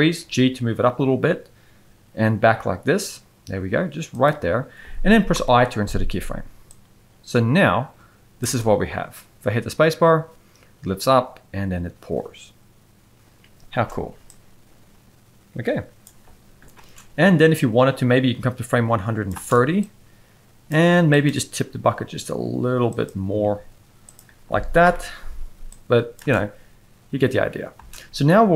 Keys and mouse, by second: 0.2 g, 5.3 i, 6.7-8.4 drag, 8.4 space, 13.7 space, 17.6-19.3 drag, 19.3 space, 19.8-20.7 drag, 21.1 click, 21.9 r, 23.4 g, 24.8 i, 25.7-26.2 drag, 26.2 space, 27.8 space.